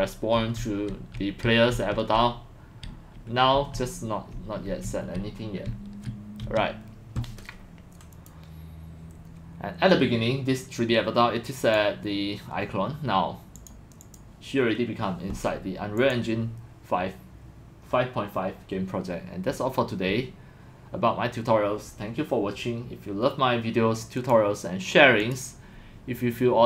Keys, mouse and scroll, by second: 0.0-6.2 typing, 6.4 Escape, 8.1 click, 8.7 click, 11.6 click, 13.6-13.9 drag, 14.0 click, 16.5 click, 18.7 click, 20.9 click, 24.2 click, 25.2 click, 25.5 click.